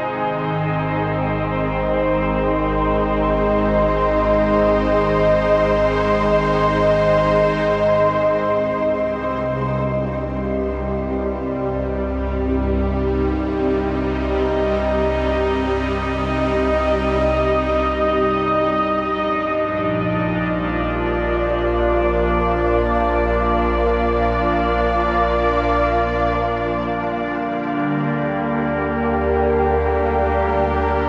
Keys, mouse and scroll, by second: 1.6-2.6 typing, 9.0-11.0 typing, 9.9 click, 10.1 click, 10.5 click, 10.8 click, 11.2-17.6 drag, 17.6 ctrl+c, 18.2 click, 18.9 ctrl+v, 20.0 click.